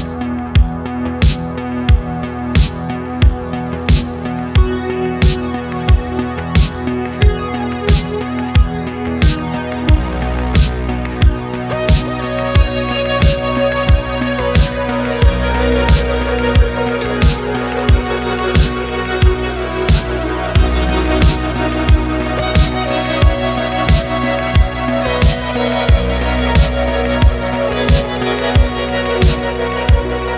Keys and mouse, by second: 1.1-4.3 drag, 6.0 click, 6.3 middle click, 7.4 e, 7.6 y, 8.8 click, 9.2 click, 10.3 middle click, 11.1 click, 12.3 e, 12.4 y, 13.7 click, 14.1 e, 14.2 y, 15.1 click, 15.7 KP_3, 17.0 middle drag, 17.4 middle click, 18.2 e, 18.4 y, 19.3 click, 19.5 middle drag, 20.1 e, 20.2 y, 21.3 click, 21.5 middle drag, 22.3 click, 22.5 middle click, 23.0 middle click, 24.3-25.5 drag, 25.9 e, 26.1 x, 26.6 click, 26.9-28.0 drag, 28.5 click, 29.4 click, 30.0 e, 30.2 x.